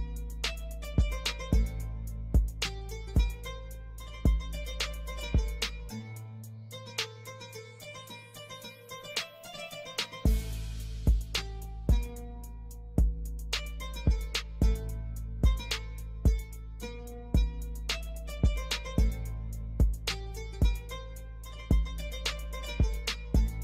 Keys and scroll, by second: 7.3 ctrl+g, 12.8 ctrl+r, 13.3 F3, 13.7 F2, 14.5 ctrl+r, 16.0 F3, 16.6 ctrl+r, 17.5 ctrl+g, 17.7 F2, 22.4 ctrl+r, 22.6 F3, 23.0 ctrl+r, 23.4 F3.